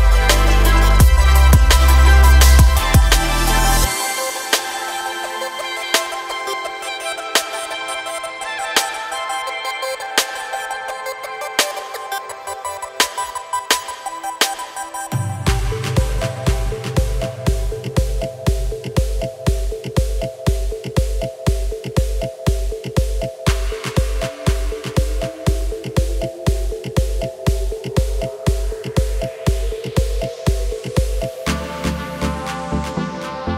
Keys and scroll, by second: 1.6 e, 4.0 e, 19.7 s.